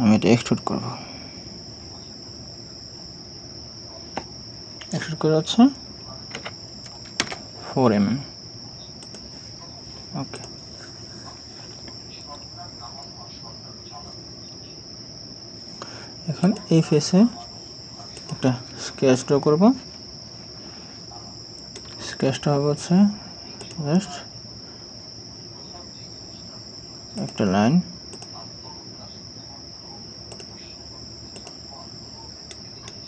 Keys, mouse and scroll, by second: 6.4 4, 7.2 Return, 20.0 scroll down 1, 21.8 right click, 32.5 right click.